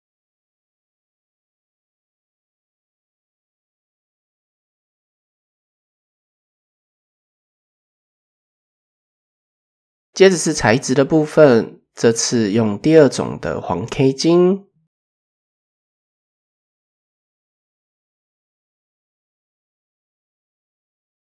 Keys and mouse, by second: 0.3 middle click, 1.6 middle click, 3.0 middle click, 3.8 Tab, 5.3-6.0 middle drag, 7.1 KP_7, 7.4 KP_1, 8.9 shift+middle click, 9.2 shift+click, 9.9-10.5 right drag, 14.0-14.9 drag, 14.7 middle drag, 15.3 KP_0, 16.6 shift+middle click, 17.8 middle click, 18.5 shift+middle click.